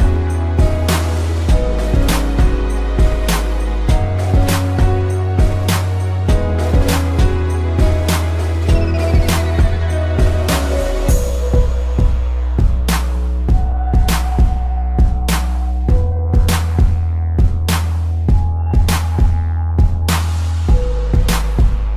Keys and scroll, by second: 0.7 space, 1.8 ctrl+z, 4.1 a, 5.0 ctrl+0, 6.6 ctrl+s, 8.2 space, 10.7 space, 11.1 p, 11.5 ctrl+=, 11.7 space, 14.0 space, 16.3 ctrl+z, 17.2 space, 19.1 space, 20.7 space.